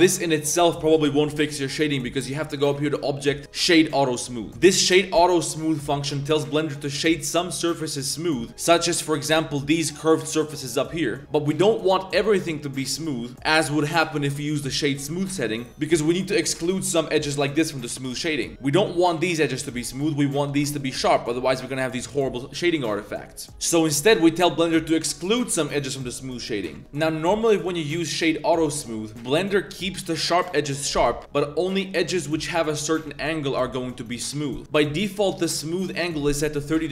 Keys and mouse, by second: 2.4-3.8 drag, 4.5-6.7 drag, 7.5 middle drag, 9.2 shift+drag, 11.2-11.6 drag, 12.2-15.0 drag, 15.3-15.6 drag, 15.7 Tab, 15.8 Tab, 16.7 shift+drag, 18.0 Tab, 18.2 shift+click, 18.9 click, 19.6 click, 20.5 Tab, 20.5 2, 20.7 alt+click, 21.6 Tab, 21.6 click, 22.4 drag, 23.3-25.1 drag, 26.8 a, 27.3 click, 27.6-28.9 drag, 31.0 click, 36.6 click.